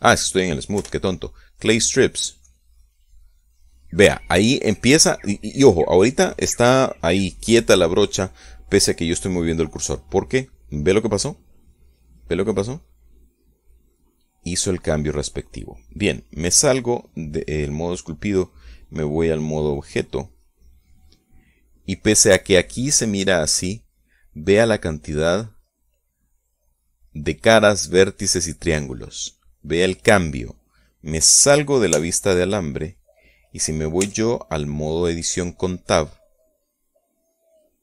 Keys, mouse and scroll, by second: 0.0 click, 0.7 shift+middle click, 2.3 3, 2.9 middle click, 4.0 click, 10.3 right click, 13.5 middle click, 15.6 middle click, 17.7 click, 18.4 click, 23.1-25.3 middle drag, 30.7 middle click, 33.5 z, 35.6 Tab.